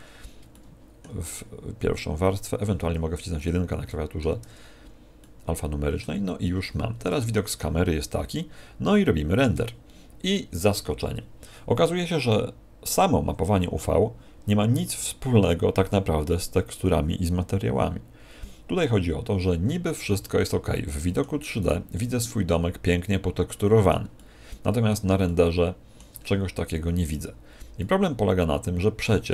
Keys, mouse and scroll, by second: 0.4 shift+middle click, 3.8 middle click, 4.4 1, 5.1 middle click, 6.9 KP_0, 19.9 Escape, 20.6 middle click, 21.5 right click, 21.9 middle click, 24.1 middle click, 25.2 shift+middle click, 27.1-27.7 scroll up 5, 27.7 middle click.